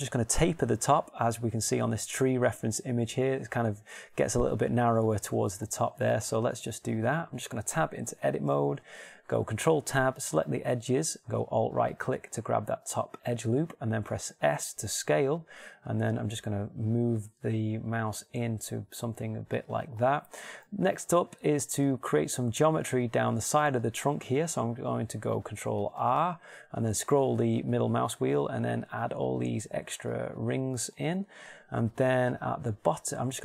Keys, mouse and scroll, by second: 8.6 Tab, 9.2 ctrl+Tab, 15.1 s, 20.2-21.7 drag, 21.7-26.5 middle drag, 26.5 ctrl+r.